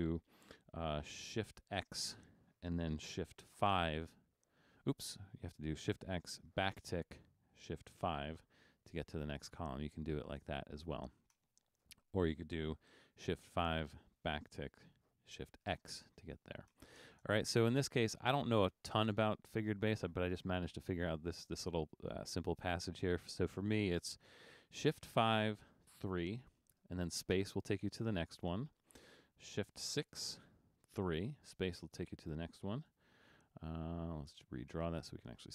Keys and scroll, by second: 1.7 shift+x, 3.7 shift+5, 5.1 BackSpace, 6.8 `, 8.2 shift+5, 10.6 BackSpace, 11.4 BackSpace, 12.0 BackSpace, 13.3 shift+5, 14.4 `, 15.7 shift+x, 16.3 BackSpace, 16.8 BackSpace, 17.4 BackSpace, 25.1 shift+5, 26.1 3, 27.4 space, 30.0 shift+6, 31.2 ctrl+shift+3, 31.6 space, 32.9 super+d.